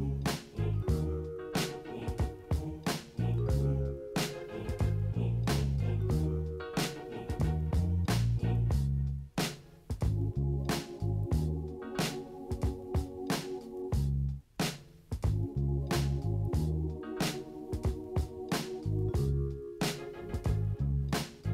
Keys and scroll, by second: 1.1 ctrl+space, 3.0 ctrl+space, 3.2 ctrl+-, 4.5 ctrl+KP_0.